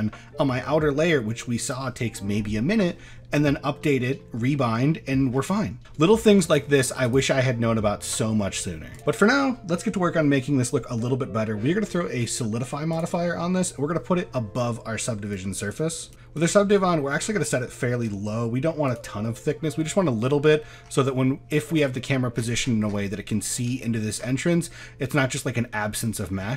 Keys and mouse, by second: 1.7 click, 3.6-4.2 middle drag, 4.9 middle drag, 6.0 shift+middle click, 6.6 middle drag, 7.1 click, 8.9-14.4 drag, 15.3-16.5 drag, 19.0 click, 20.0-20.4 middle drag, 21.1 middle click, 23.3 shift+middle drag, 24.5-25.3 middle drag, 25.8 middle click, 26.1 shift+middle drag.